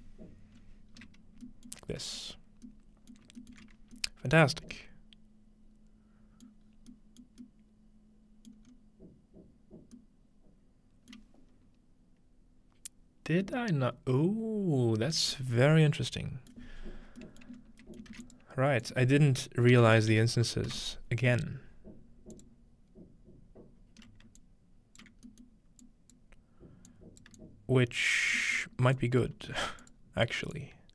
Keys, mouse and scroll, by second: 0.9 scroll down 2, 1.5-2.9 middle drag, 2.0 z, 3.2 alt+middle click, 3.8-6.5 scroll up 1, 4.5 middle click, 6.5-6.9 middle drag, 6.7-8.2 scroll down 1, 7.3 middle click, 8.5 middle click, 8.7-10.3 scroll up 1, 11.2-13.4 middle drag, 16.5 middle click, 16.8-17.3 scroll down 1, 17.5 middle click, 17.6-17.9 scroll up 2, 18.0 shift+middle click, 18.2 shift+a, 18.3 click, 18.8 click, 19.8-21.2 typing, 22.3 click, 24.4 alt+click, 25.3-30.9 alt+drag, 25.3-27.3 alt+middle drag, 28.1-29.0 scroll down 2, 28.4-30.9 middle drag, 29.4 g.